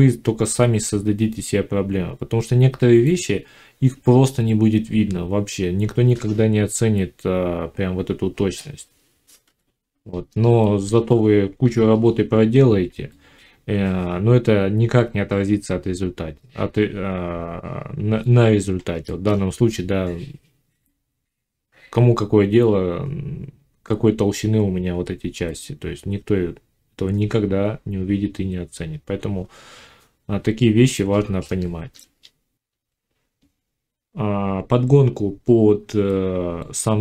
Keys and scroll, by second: 9.3 5, 11.5 5, 32.7 F9.